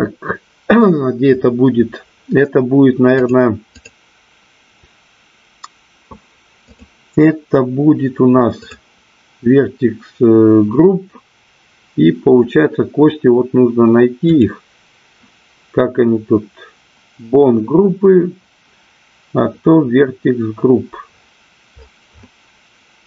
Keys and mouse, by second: 3.7 click, 6.7 click, 8.6 click, 14.2 click.